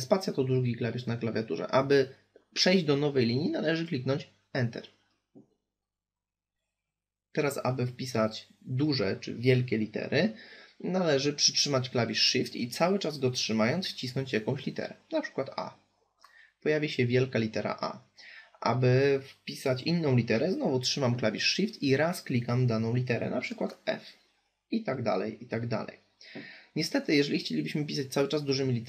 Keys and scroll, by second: 3.4 Return.